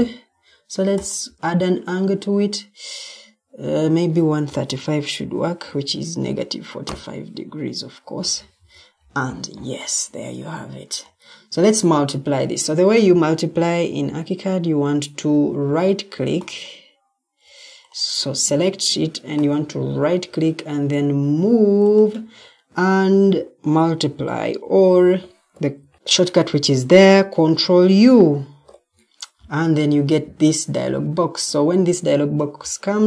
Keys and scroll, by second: 4.4-5.5 typing, 6.7 Return, 8.3 Escape, 12.0 Escape, 12.8 Escape, 24.3 Escape, 24.7 Escape, 25.7 ctrl+t, 25.9 Escape, 28.4 ctrl+u.